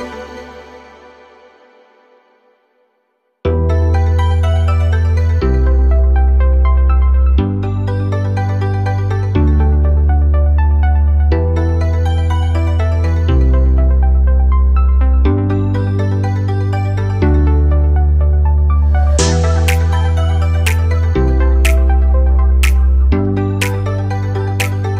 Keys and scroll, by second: 19.0 ctrl+d.